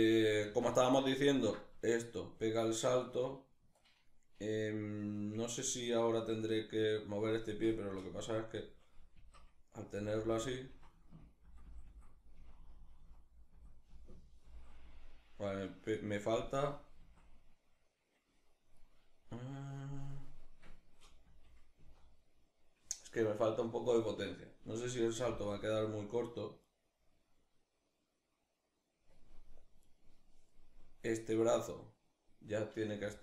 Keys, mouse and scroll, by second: 0.1 alt+q, 2.3 right click, 8.3 Left, 8.8 Right, 9.6 Left, 10.3 Right, 11.1 Left, 12.0 Right, 13.1 Left, 14.5 Right, 19.7 right click, 20.9 Left, 21.4 Right, 24.9 g, 26.3 right click, 29.5 right click, 30.7 right click, 32.7 g.